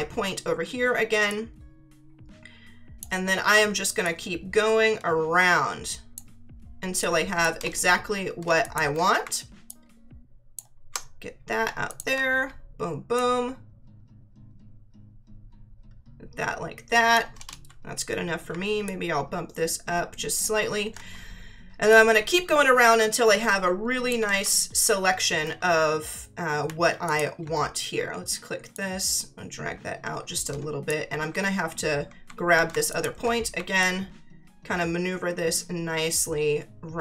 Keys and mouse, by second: 1.3 click, 4.0 click, 7.0 click, 8.6 ctrl+click, 9.7 alt+click, 11.9 click, 13.1 click, 18.8 ctrl+click, 21.9 click, 24.3 ctrl+z, 27.0 ctrl+click, 28.7 click, 32.9 ctrl+click, 33.8 alt+click.